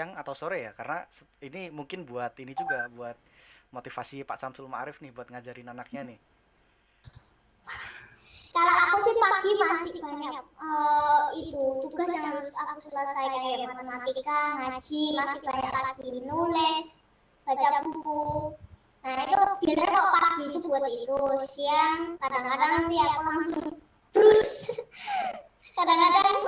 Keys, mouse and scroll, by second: 26.1-26.4 scroll down 1.